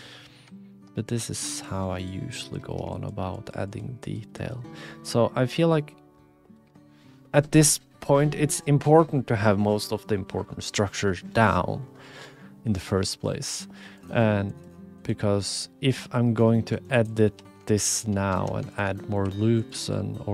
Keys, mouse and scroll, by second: 0.0 click, 0.4 shift+click, 0.7 shift+click, 1.2 click, 2.1 ctrl+click, 2.9 shift+click, 3.3 shift+click, 3.7 shift+click, 5.1 click, 6.1 click, 13.9 click, 14.5 click, 15.0 click, 15.6 click, 15.6 right click, 16.5 click, 16.5 right click, 17.2 2, 17.8 alt+shift+click, 18.3 ctrl+z, 19.2 e, 19.7 e.